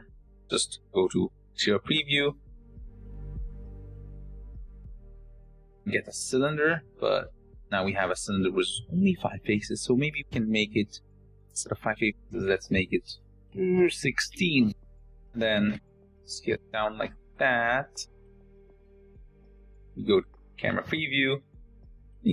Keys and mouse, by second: 2.5 z, 4.9 shift+a, 7.7 click, 9.7 click, 11.0 x, 11.0 shift+a, 12.1-15.1 drag, 15.9 click, 16.8 s, 18.6 s, 21.0 KP_0, 21.9 g.